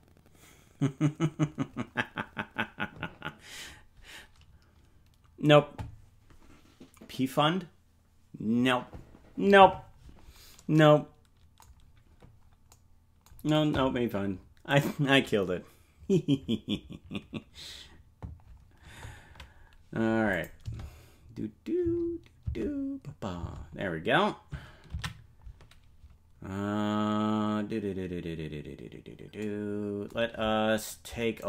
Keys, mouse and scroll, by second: 14.8 right click, 20.3 click, 20.6 space, 23.3 space, 27.6 ctrl+s.